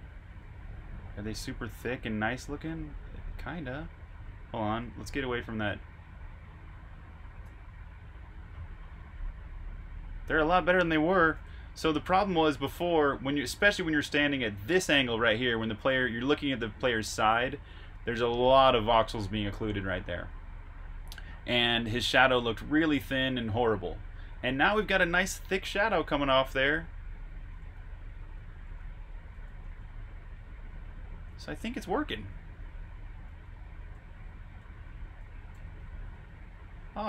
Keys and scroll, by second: 1.4 e, 4.2-4.8 typing, 7.6 typing, 8.6-11.2 typing, 26.9-29.6 typing, 30.6-36.3 typing.